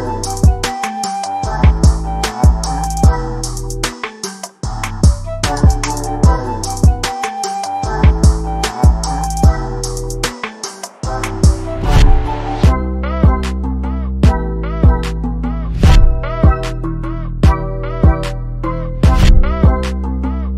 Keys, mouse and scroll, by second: 1.0 click, 1.9 click, 2.3 click, 2.9-3.2 drag, 3.5-4.0 drag, 4.3 click, 5.1 KP_1, 5.8 click, 6.5 z, 7.0 middle click, 7.3 z, 7.8 middle drag, 8.4 KP_3, 9.1 g, 9.6 z, 10.0 middle click, 10.9 click, 11.0 middle drag, 11.3 drag, 11.5 shift+middle click, 12.1 middle click, 13.7-14.9 drag, 15.1 shift+middle click, 16.6-16.9 middle drag, 17.5 click, 17.8 middle click, 18.7 ctrl+z, 19.2 ctrl+z, 20.2 ctrl+z, 20.3 ctrl+z, 20.5 middle click.